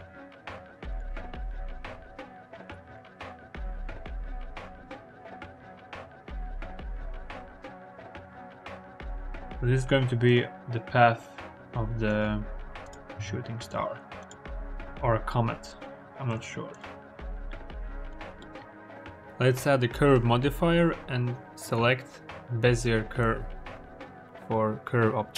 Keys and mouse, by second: 1.8 Tab, 2.2 Escape, 2.2-2.8 typing, 3.3 Return, 4.0 g, 4.3 click, 5.1 g, 6.4 g, 7.0 click, 8.6 r, 13.0 s, 13.5 click, 14.1 click, 14.7 r, 14.7 s, 15.5 click, 17.3 KP_1, 18.3 Tab, 18.4-18.9 middle drag, 19.0 middle click, 19.6-23.7 middle drag, 24.5 middle click.